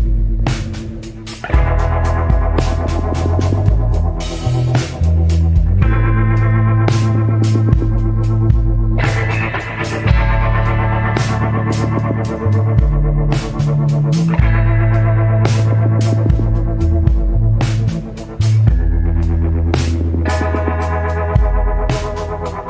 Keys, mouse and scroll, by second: 1.9 scroll down 1, 4.1 scroll up 1, 7.0 scroll down 1, 7.7 scroll up 1, 8.3 scroll down 1, 10.0 scroll up 1.